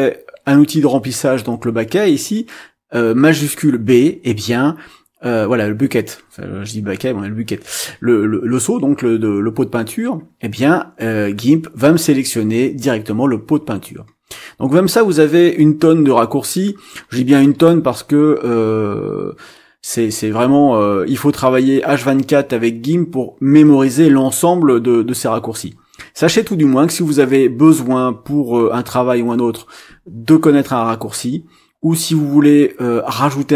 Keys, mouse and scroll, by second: 14.3-14.8 scroll down 2, 15.3 scroll down 2, 16.2-16.6 scroll down 2, 16.9-18.6 scroll down 8, 24.4-25.3 scroll down 4, 27.2 scroll up 2, 32.8-33.1 scroll up 2, 33.3-33.5 scroll up 6.